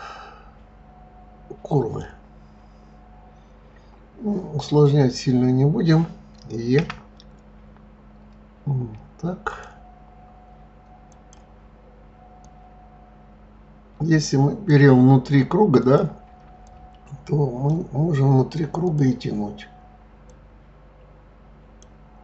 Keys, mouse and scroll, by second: 6.7 e, 11.1 click, 12.3 click, 15.8 click, 16.6 click, 18.8 click, 20.3 click.